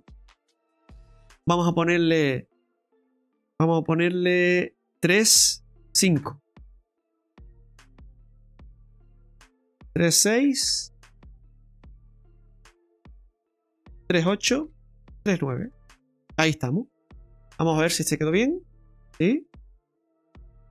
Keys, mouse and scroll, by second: 0.1 BackSpace, 1.3 BackSpace, 1.4 ctrl+z, 1.7 click, 4.8 BackSpace, 7.9 click, 12.8 click, 16.7-17.2 scroll down 6, 17.3 shift+middle click, 17.9-19.1 scroll up 6, 19.1-19.5 scroll down 4, 19.7 shift+middle click, 20.3-20.7 scroll up 2.